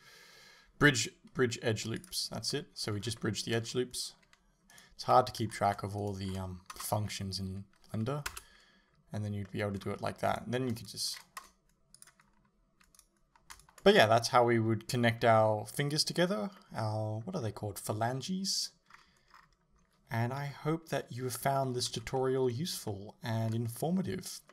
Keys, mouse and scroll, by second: 2.1 o, 4.7 alt+right click, 6.0 alt+shift+right click, 8.3 space, 8.4 Return, 9.5 middle click, 10.3 alt+right click, 10.8 alt+shift+right click, 11.5-13.4 typing, 11.6 alt+right click, 11.9 alt+shift+right click, 12.0 middle click, 12.2 alt+shift+right click, 12.5 right click, 12.5 alt+shift+right click, 12.9 right click, 13.1 alt+shift+right click, 13.3 alt+right click, 13.5-24.5 shift+middle drag, 18.9-19.4 scroll up 2, 19.4-20.5 scroll down 2, 20.5 KP_7, 21.9 Tab.